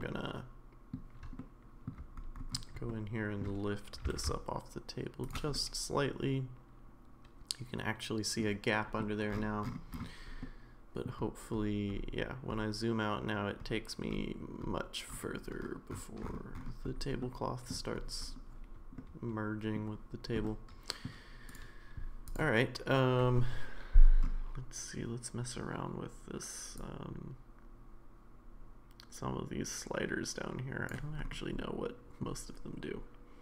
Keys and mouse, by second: 0.0-0.9 middle drag, 1.4-1.9 shift+middle drag, 2.9-3.4 shift+middle drag, 3.9 g, 5.5-8.4 middle drag, 10.4-11.1 middle drag, 17.2-17.7 middle drag, 19.0-19.8 middle drag, 20.5-21.1 middle drag, 26.9-30.9 drag, 31.6 middle click.